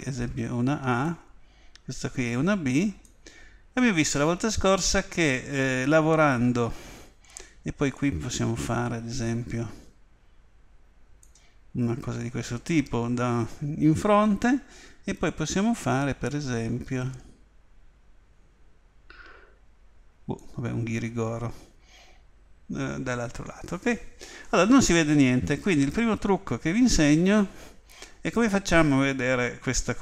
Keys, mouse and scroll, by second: 2.3-5.7 drag, 8.0 click, 16.3 click.